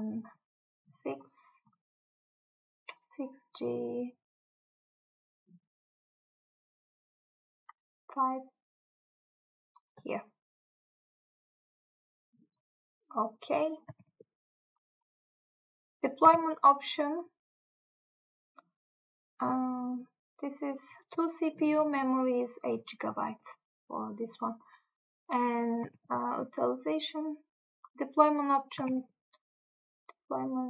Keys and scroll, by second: 14.0 Tab, 16.4 Tab, 26.1 Tab, 29.0 Tab.